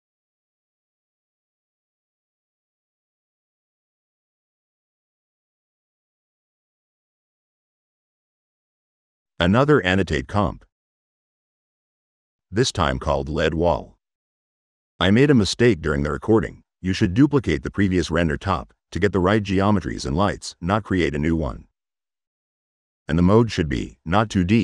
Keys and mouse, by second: 1.5 click, 3.6 middle click, 3.8 drag, 6.6 click, 7.5 click, 9.9 click, 10.8-11.4 drag, 12.1 click, 12.2 click, 12.7-14.0 typing, 15.3 middle drag, 15.9 click, 16.5 click, 17.3 n, 19.2 click, 20.7 middle click, 21.0 middle click, 23.5 click, 23.9 click.